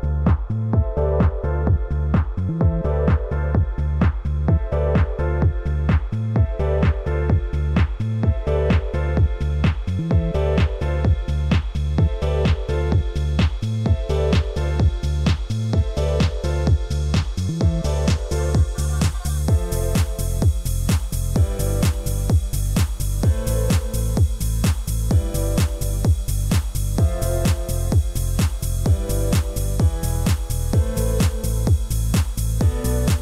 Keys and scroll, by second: 25.7 ctrl+t, 32.3 ctrl+l.